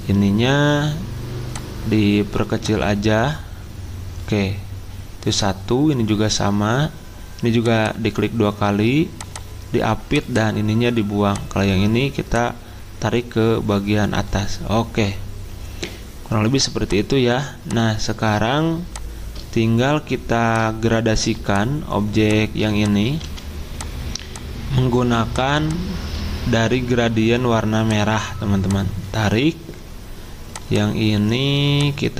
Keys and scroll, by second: 23.2 c.